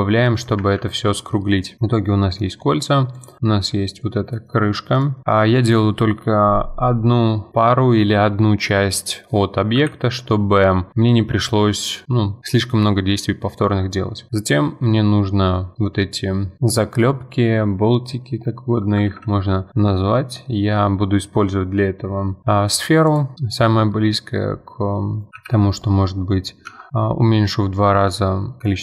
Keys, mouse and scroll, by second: 0.4 click, 0.6 F4, 0.9 scroll down 1, 1.1-1.6 middle drag, 1.6 scroll down 1, 1.8-2.6 middle drag, 2.6-3.1 scroll up 2, 3.1 click, 4.1 z, 4.5 middle drag, 4.7-5.2 scroll down 2, 4.9 click, 5.2-7.6 middle drag, 9.8 KP_1, 10.5-12.6 scroll up 2, 17.9-18.9 scroll up 1, 18.9 scroll up 1, 19.1 shift+a, 25.2-27.0 drag, 28.6-28.8 drag.